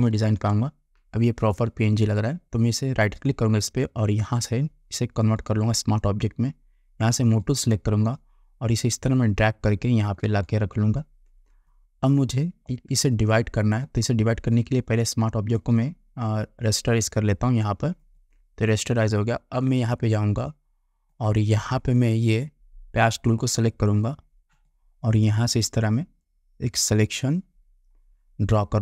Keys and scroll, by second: 0.2 ctrl+0.